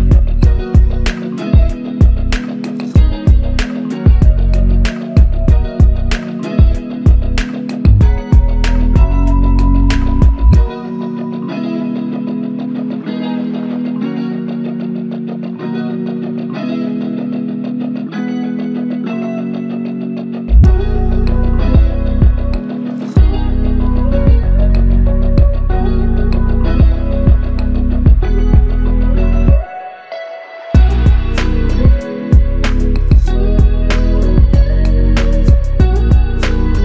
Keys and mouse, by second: 5.6 shift+click, 10.9 double click, 14.5 alt+click, 16.5 alt+click, 18.6 double click, 21.4 alt+click, 25.3 alt+click, 25.6 shift+click, 26.5 shift+click, 28.7 typing, 32.2 typing, 32.2 double click, 35.7 shift+click.